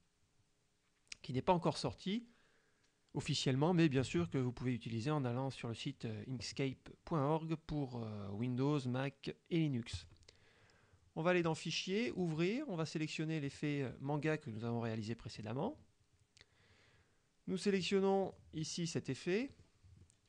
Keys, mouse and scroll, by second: 10.0 click, 11.5 click, 12.2 click, 13.5 click, 15.5 click, 18.3 click, 19.6 click, 20.1 click.